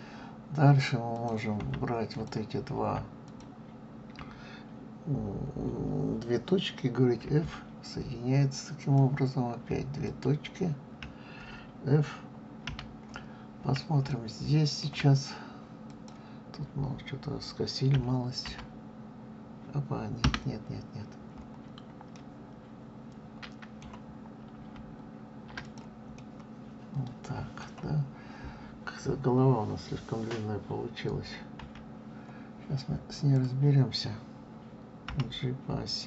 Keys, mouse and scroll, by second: 1.1 click, 2.1 shift+click, 3.2 shift+click, 7.2 f, 8.8 click, 10.0 shift+click, 12.6 f, 13.5-14.1 scroll down 1, 14.1-15.8 shift+middle drag, 15.8 click, 17.9 f, 18.4 g, 21.6-22.1 scroll up 1, 22.1-24.5 middle drag, 24.5 ctrl+z, 25.6 click, 26.1-29.1 middle drag, 31.6 KP_3, 33.1 click, 35.0 g.